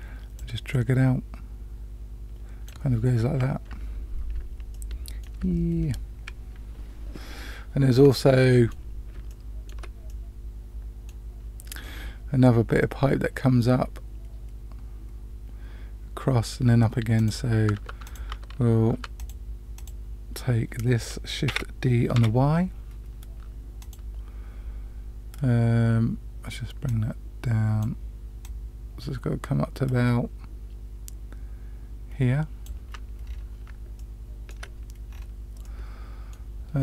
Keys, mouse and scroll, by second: 0.3-2.6 drag, 4.7 shift+middle click, 8.0 middle click, 9.2 shift+middle click, 10.0-11.1 middle drag, 17.1 click, 17.7 Tab, 18.0 click, 18.3 Tab, 18.9 Tab, 19.1 click, 19.7 click, 21.4 shift+d, 26.8-27.8 drag, 28.4-32.6 drag, 33.2 scroll up 1, 33.3 scroll down 1, 33.3 scroll up 1, 33.9-34.5 shift+middle drag, 35.0 scroll up 2, 35.6-36.3 middle drag.